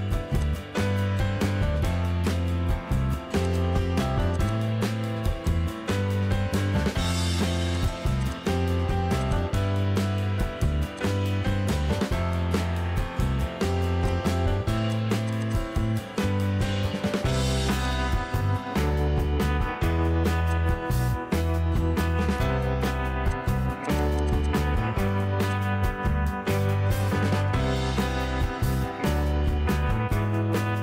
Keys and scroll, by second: 0.1 p, 1.4-4.1 typing, 7.3 p, 8.0 space, 8.6 p, 9.8 space, 11.9 ctrl+c, 12.3 Escape, 13.9 p, 15.2 space, 16.3 ctrl+g, 16.8 m, 24.9 m, 26.3-29.2 typing.